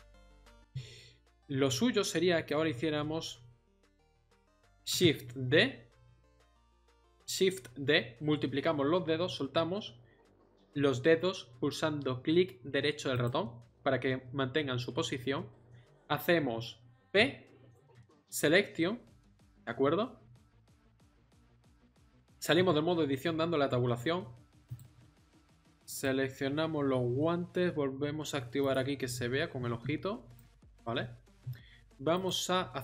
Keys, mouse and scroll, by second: 0.3 middle click, 1.6 middle click, 4.9 shift+d, 17.0 p, 22.5 Tab, 29.1-32.1 middle drag.